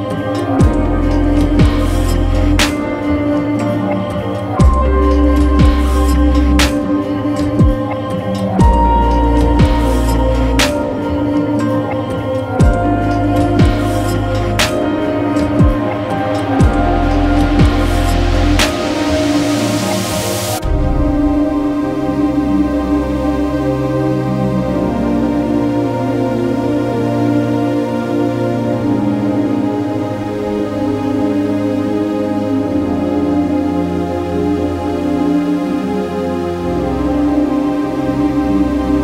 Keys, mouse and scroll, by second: 0.5 space, 1.2-2.9 right drag, 2.9 click, 3.7-4.9 right drag, 4.9 Return, 5.1 v, 5.3 Return, 5.4 b, 5.8 Return, 5.9 Tab, 6.5-9.8 typing, 11.2 p, 11.5 x, 11.6 /, 12.9-17.0 right drag, 17.0 l, 17.2 b, 17.5 l, 19.1-25.3 drag, 25.3 middle click, 25.9-27.8 drag, 27.8-29.4 middle drag, 29.4-31.0 drag, 31.0-33.7 middle drag, 33.7-38.3 drag, 38.3-39.0 middle drag.